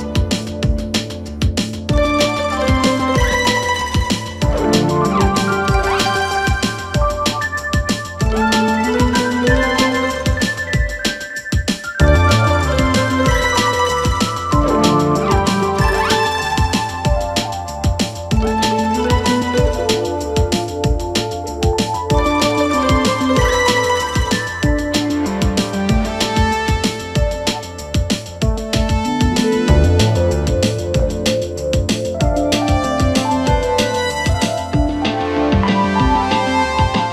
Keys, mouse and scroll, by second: 0.0 2, 0.2 click, 2.4 click, 3.3-6.4 drag, 7.3 g, 8.8 click, 9.7 g, 11.5-12.4 scroll down 4, 12.4-13.3 shift+middle drag, 13.3-13.7 scroll up 1, 13.7 e, 15.9 r, 17.7 e, 19.4 r, 21.7 e, 24.5 r, 25.9 s, 27.2 r, 28.6 g, 30.3 shift+middle click, 30.9-31.7 scroll up 1, 31.7 e, 33.3 r, 34.6 g, 35.9 s, 36.9-37.1 scroll down 1.